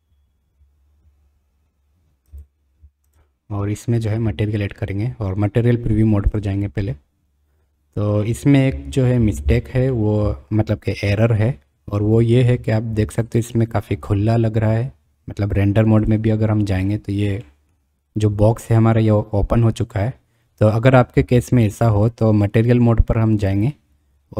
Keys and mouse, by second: 10.0 click, 17.4 middle drag, 17.6 click, 23.5-24.3 drag.